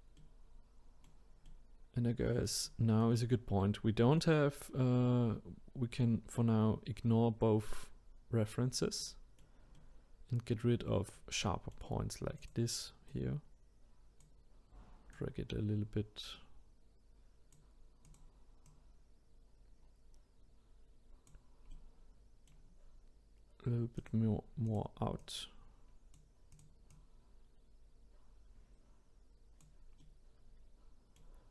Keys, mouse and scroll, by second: 12.4 click, 13.1 click, 15.1 click, 18.1 click, 18.6 click, 21.7-24.0 middle drag, 24.0 click, 24.6 click, 25.2-26.6 drag, 26.9-29.9 drag, 30.0-31.5 middle drag.